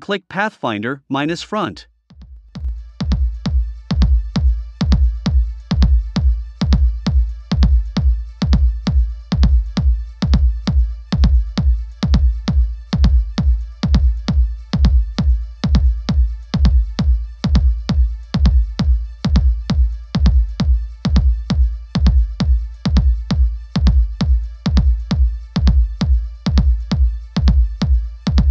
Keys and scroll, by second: 3.3 super+c, 3.6 super+f, 4.1 shift+Down, 6.3 a, 11.0 v, 11.9 shift+Up, 12.5 shift+Down, 14.9 shift+Up, 19.0 v, 23.8 a.